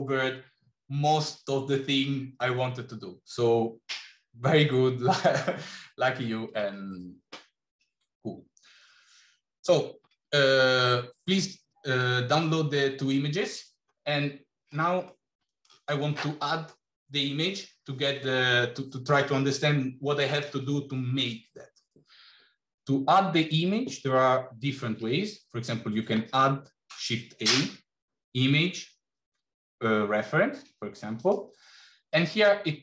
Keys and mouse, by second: 15.0-15.5 middle drag, 24.6 shift+a.